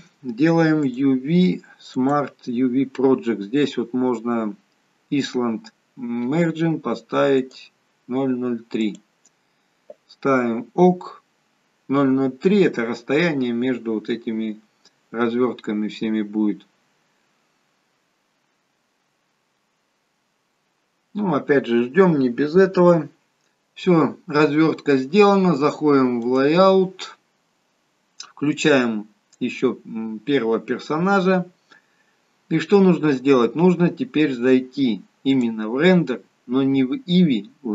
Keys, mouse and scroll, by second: 26.6 click, 29.7 click, 35.4 click.